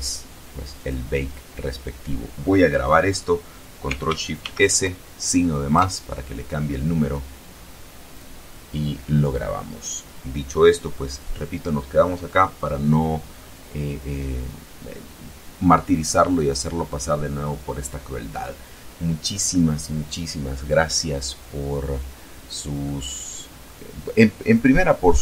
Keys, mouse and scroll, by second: 3.1 ctrl+shift+s, 4.4 KP_Add, 6.8 click, 21.5-22.6 middle drag, 23.6-25.0 middle drag.